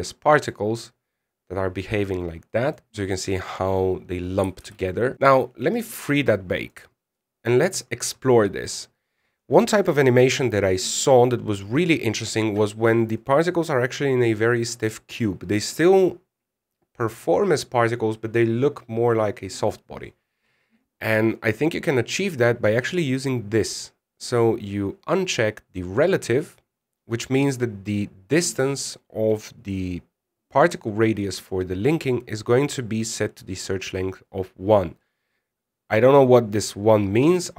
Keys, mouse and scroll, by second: 0.6 scroll down 3, 1.0 middle click, 1.3 scroll up 2, 5.1 alt+a, 7.3 click, 8.5 click, 9.1-9.5 scroll down 13.